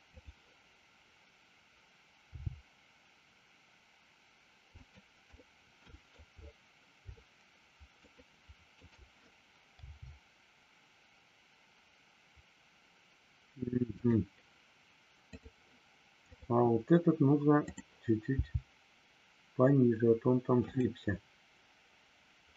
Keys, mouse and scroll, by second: 0.1 click, 4.7 click, 5.4 middle click, 6.0 scroll down 1, 7.1 shift+middle click, 8.1 shift+scroll up 1, 8.3 shift+middle click, 15.3 click, 16.3 click, 20.6 click, 22.5 scroll up 1.